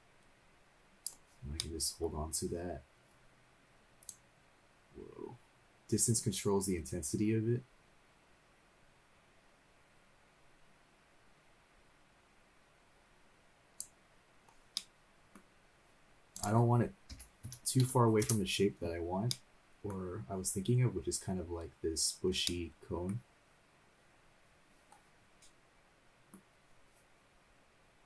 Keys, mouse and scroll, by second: 1.5 middle click, 2.2-2.7 scroll up 2, 4.1-13.8 drag, 14.7 middle click, 16.3-18.2 drag, 19.3 middle click, 22.4 middle click, 25.4 middle click, 25.4 scroll down 2.